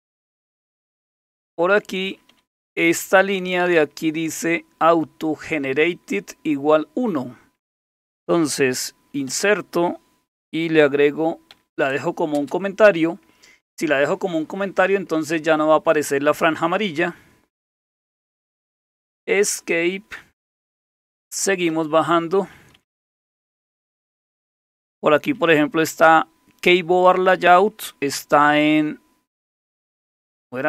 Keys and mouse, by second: 0.5-3.9 typing, 9.3 typing, 11.5-12.3 typing, 15.1 Right, 19.2 Escape, 19.4 Escape, 19.6 Escape, 21.7-25.5 typing, 27.8-28.3 typing.